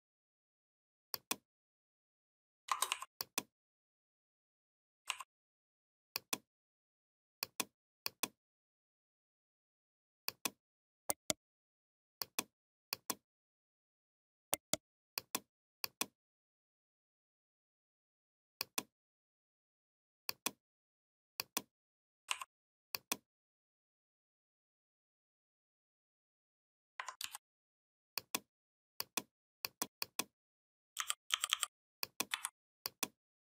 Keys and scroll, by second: 27.0 ctrl+d, 30.8 i, 32.1 v.